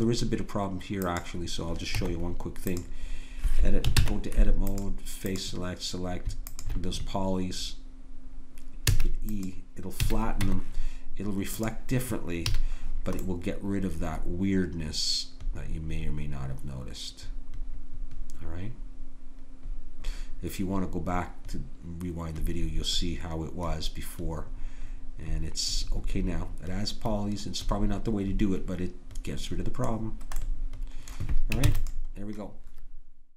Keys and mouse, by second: 1.0 click, 2.0 Tab, 4.0 ctrl+Tab, 8.9 e, 10.0 a, 10.5 Tab, 12.5 a, 30.4 middle click, 31.7 ctrl+s.